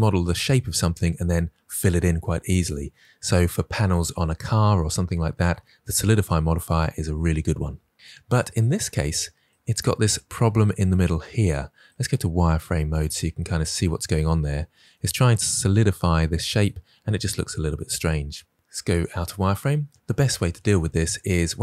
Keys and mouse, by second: 11.9 click, 18.9 click.